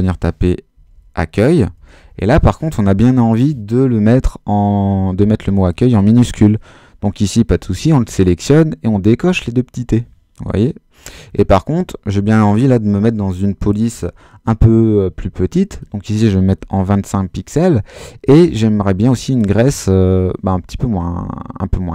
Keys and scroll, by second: 0.0-2.2 typing, 16.5 2, 16.8 5.